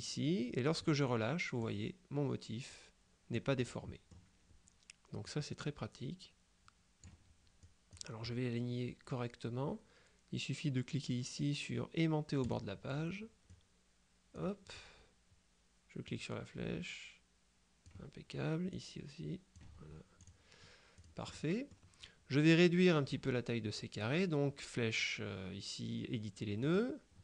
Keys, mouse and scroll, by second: 1.7-3.9 drag, 5.3-7.6 drag, 7.7-8.5 drag, 12.5 click, 13.6 click, 16.1-18.4 drag, 18.8 click, 20.3 click, 21.0 click, 26.7 click.